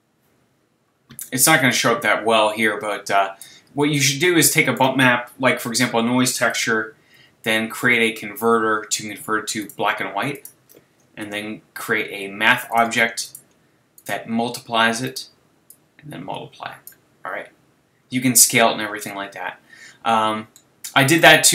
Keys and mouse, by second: 1.7-3.4 drag, 4.5-6.2 drag, 6.5 shift+a, 11.2 shift+a, 14.0-15.6 drag, 15.7 click, 16.0 click, 16.7-17.3 drag, 18.4-21.5 middle drag.